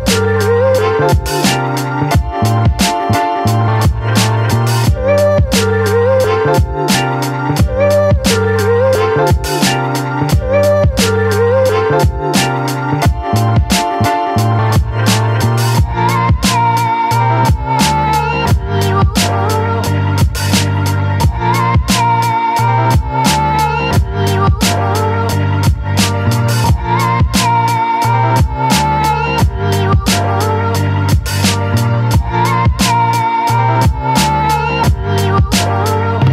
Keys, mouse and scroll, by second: 4.0-11.9 drag, 17.6-19.8 drag, 21.2 right click, 21.7-26.0 drag, 27.7 right click, 28.4 click, 29.9-32.1 shift+drag, 35.2-36.3 drag.